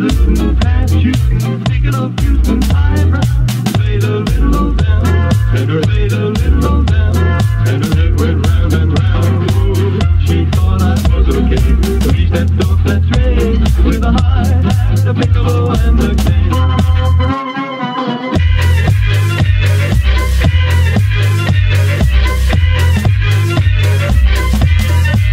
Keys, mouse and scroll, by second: 0.6 click, 1.5 alt+right click, 2.3-4.2 drag, 6.3-7.8 scroll down 1, 9.4 click, 10.4 shift+d, 11.7 ctrl+shift+right click, 12.2-15.8 drag, 16.4-20.4 middle drag, 20.4 BackSpace, 22.3-23.9 drag, 23.9-25.3 middle drag.